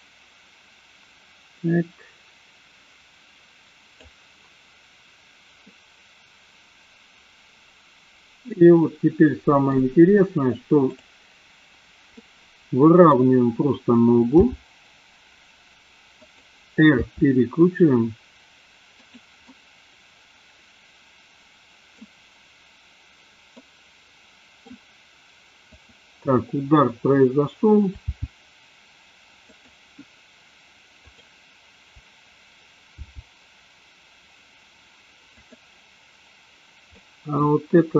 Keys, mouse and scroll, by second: 5.8-9.6 middle drag, 10.8 click, 12.3-13.1 middle drag, 14.4 g, 17.0 r, 19.5-22.0 middle drag, 23.5-24.6 middle drag, 25.6 click, 28.1 g, 29.5 click, 30.9 click, 33.0 g, 37.0-37.4 middle drag.